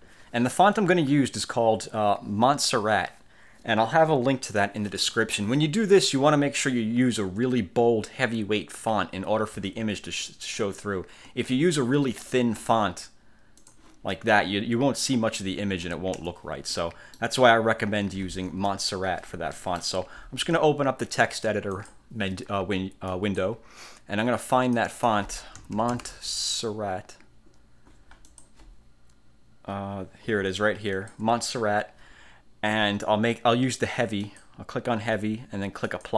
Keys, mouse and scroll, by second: 0.0-0.1 typing, 11.6-12.0 ctrl+scroll up 2, 13.7 click, 15.6-16.0 ctrl+scroll down 2, 16.2 ctrl+z, 16.8 ctrl+click, 17.8 1, 18.6 BackSpace, 19.5 scroll down 2, 19.6 click, 21.8 click, 23.2 click, 24.6 click, 25.5-26.7 typing, 28.4 click, 31.0 click, 34.3 click, 36.0 click.